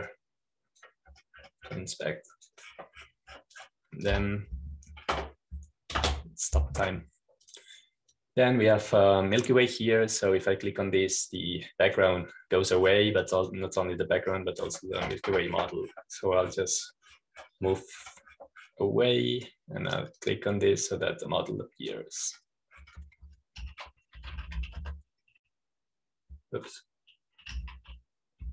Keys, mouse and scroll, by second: 0.5-1.9 scroll up 1, 1.9 scroll up 1, 3.9-6.0 drag, 6.0 Home, 8.3 _, 9.3-11.4 drag, 11.6 click, 13.1-14.7 drag, 14.7-15.1 scroll down 1, 15.1-17.9 drag, 17.9-19.7 scroll down 1, 22.2-24.4 drag, 24.9 click, 25.8-27.0 typing.